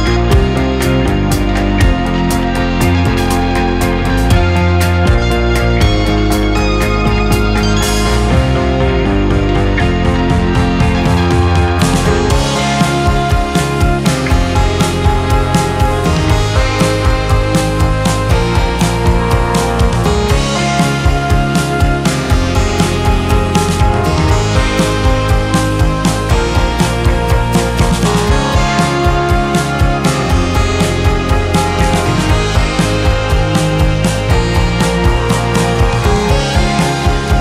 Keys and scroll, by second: 9.6 2, 12.4 ctrl+s, 26.5 2, 28.1 ctrl+KP_0.